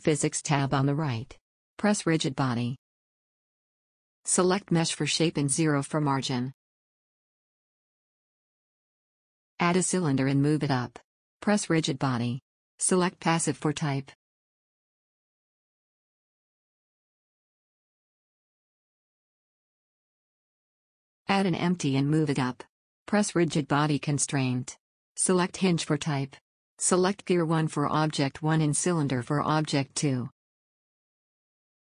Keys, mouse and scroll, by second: 0.4-8.8 drag, 9.6 middle drag, 10.0 shift+a, 13.6 s, 14.5 g, 18.4-21.3 drag, 21.7 shift+a, 25.7 s, 26.8 g, 28.5-31.9 drag.